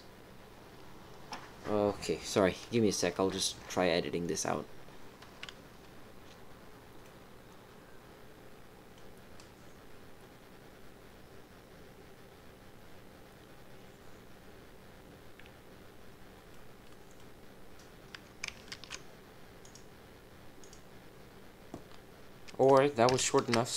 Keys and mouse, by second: 7.0-8.9 middle drag, 16.5 click, 16.5 middle click, 18.7 ctrl+r, 22.6 click, 23.2 shift+click.